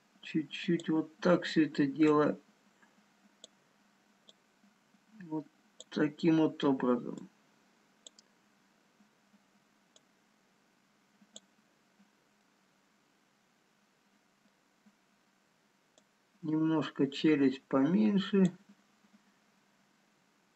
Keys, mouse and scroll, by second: 1.2-2.3 scroll up 2, 2.3 click, 4.9 click, 7.4 click, 10.3 click, 13.8 middle click, 15.0 scroll up 1, 17.9 click.